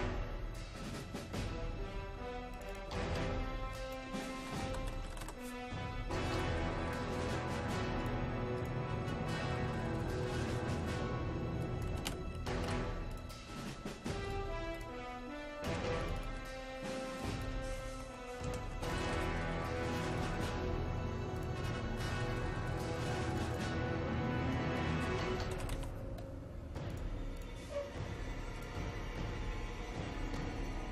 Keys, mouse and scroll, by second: 4.4-5.8 typing, 6.4-12.8 drag, 11.7-13.1 typing, 13.1 click, 17.7-19.6 typing, 20.1 click, 25.3-26.3 typing, 26.9 click.